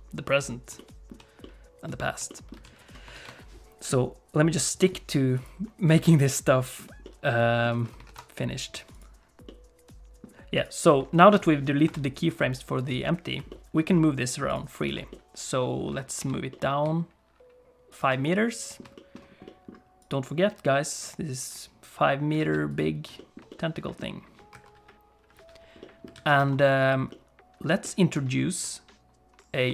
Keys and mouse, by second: 0.8 shift+middle click, 1.4 middle click, 2.3 shift+click, 2.6 alt+a, 3.2 ctrl+s, 5.4 click, 7.0 middle click, 7.7 alt+a, 8.1 ctrl+s, 8.9 click, 9.4 middle click, 10.5 click, 11.4 shift+click, 11.8 KP_7, 13.5 click, 13.5 middle click, 14.5 click, 15.1 shift+middle click, 16.2 g, 18.2 middle click, 18.9 middle click, 19.4 middle click, 21.0 click, 22.4 alt+a, 22.7 click, 23.1 shift+click, 23.5 click, 24.5 KP_1, 25.8 click, 26.1 alt+a, 26.4 ctrl+s, 27.1 click, 27.8 shift+click, 28.1 shift+c, 28.3-29.7 shift+middle drag.